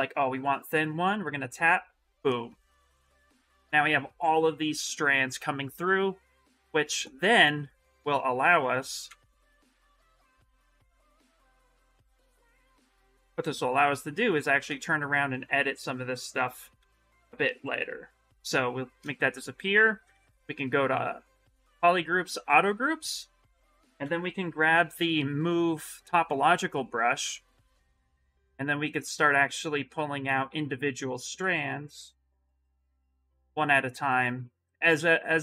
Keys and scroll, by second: 2.2 shift+f, 8.8 ctrl+z, 11.8 s, 14.4 ctrl+z, 16.5 ctrl+z, 18.8 shift+f, 19.9 2, 23.8 b, 24.2 m, 27.4 s, 30.2 ctrl+z, 30.3 ctrl+s, 31.2 Escape, 31.9 s, 32.7 ctrl+z.